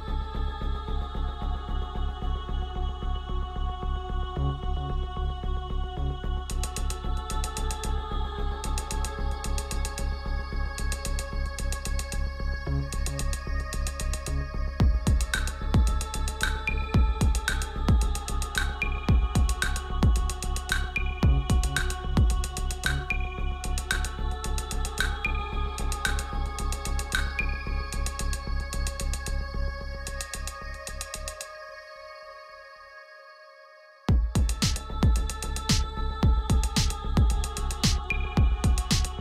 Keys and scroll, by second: 26.4 Return, 31.4 b.